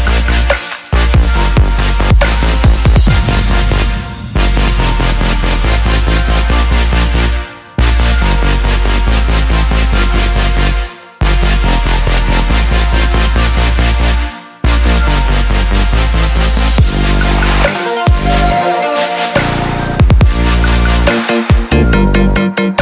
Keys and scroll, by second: 4.9 ctrl+j, 20.2 ctrl+j.